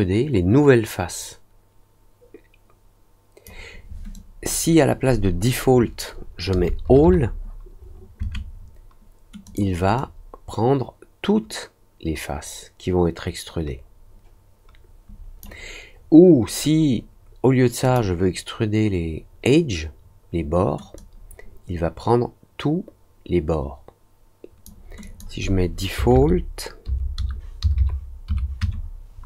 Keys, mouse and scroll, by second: 4.1 click, 9.4 click, 9.9 click, 17.8 click, 20.9-24.6 drag, 25.0 click.